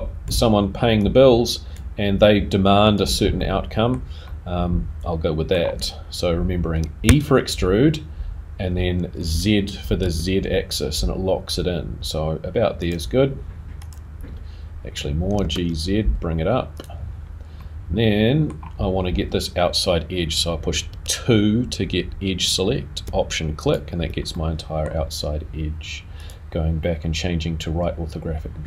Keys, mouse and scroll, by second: 3.5 middle click, 13.9 click, 17.6 middle click, 17.6 g, 21.3 2, 24.0 alt+click, 24.3 middle click, 26.2 click, 28.5 scroll up 2.